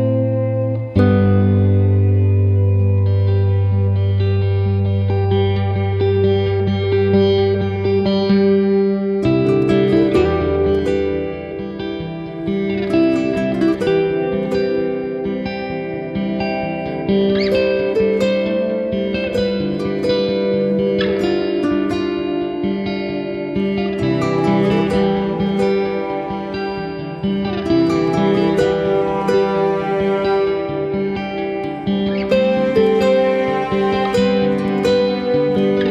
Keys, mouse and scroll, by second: 3.1 KP_7, 3.9 r, 5.0 middle click, 7.8 click, 8.6 middle click, 10.0 middle click, 11.7 middle click, 14.0 KP_1, 23.4 middle click, 25.9 KP_7, 26.6 click, 27.1 click, 27.3 click, 28.8 click, 28.8 r, 30.3 g, 32.6 r, 33.7 g.